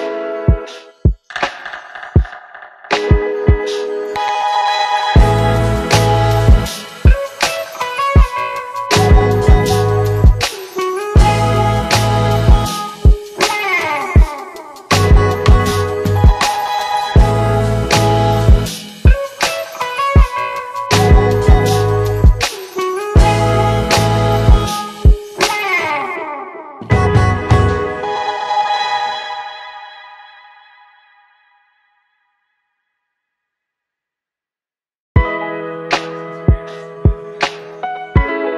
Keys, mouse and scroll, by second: 0.3 click, 1.6 click, 4.1 click, 4.3 shift+Down, 4.8 Up, 5.7 click, 8.5 click, 10.2 click, 13.9 click, 15.6-16.1 click, 18.9 shift+Up, 19.9 shift+Down, 20.5 click, 21.9-23.0 click, 28.2 click, 30.4 click, 31.6 click, 35.4-35.8 click.